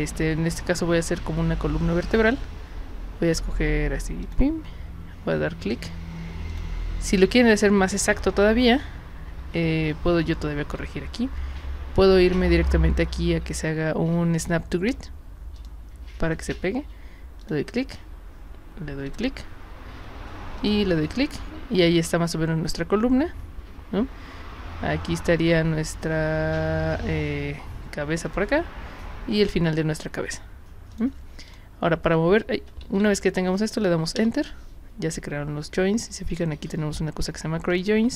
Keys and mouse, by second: 4.2 click, 6.5 click, 9.4 ctrl+z, 10.6 ctrl+z, 15.6 click, 17.4 click, 19.0 click, 20.6 click, 28.2 click, 29.4 click, 30.9 click, 31.5 click, 32.8 ctrl+z, 34.2 Return, 37.7 click.